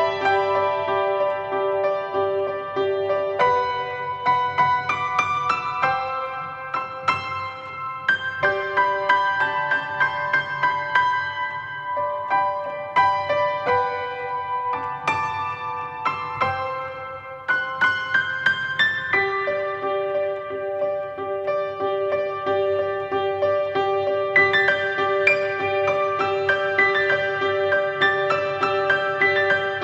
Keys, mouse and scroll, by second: 0.4 scroll down 1, 1.3 s, 1.6 click, 3.4-5.5 drag, 3.6 scroll up 1, 5.8 alt+a, 6.1 scroll down 1, 6.3-6.7 scroll up 1, 8.4 click, 10.3 click, 10.5-10.8 drag, 12.3 scroll down 1, 12.4 alt+a, 13.5 drag, 14.2 click, 16.1 alt+a, 16.4 scroll up 1, 16.8 scroll down 1, 20.3 scroll up 1, 21.0 click, 22.2 alt+a, 22.4-22.8 scroll up 1, 23.5 scroll down 1, 25.8-26.4 scroll down 1, 26.4 KP_1, 26.8 KP_3, 27.9 scroll up 1, 28.4 scroll down 1, 28.6 s, 28.8 click, 29.0-29.5 scroll down 2.